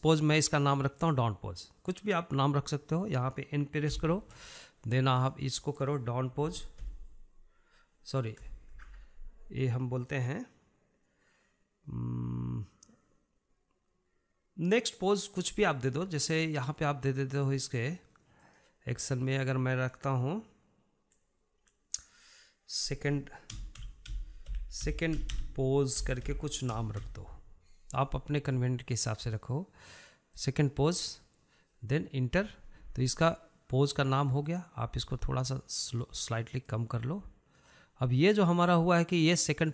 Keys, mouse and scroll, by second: 1.9 click, 4.9 n, 6.1-9.2 drag, 9.7 BackSpace, 19.4-22.5 drag, 35.4-39.7 drag.